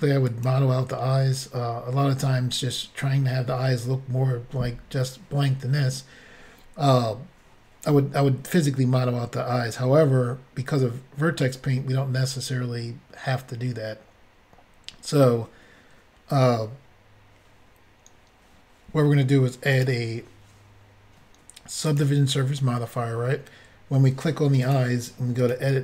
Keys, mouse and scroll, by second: 0.3 click, 19.8 click, 21.9 click, 24.7 click, 25.4 click, 25.4 click, 25.5 click.